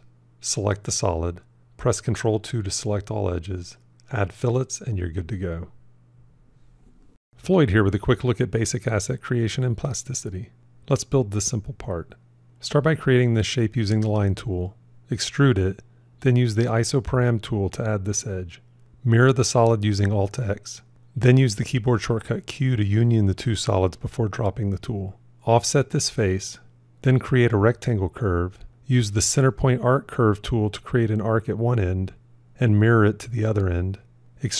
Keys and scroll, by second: 1.0 ctrl+2, 16.5 ctrl+r, 17.0 Tab, 19.2 alt+x, 21.4 q, 32.4 alt+x.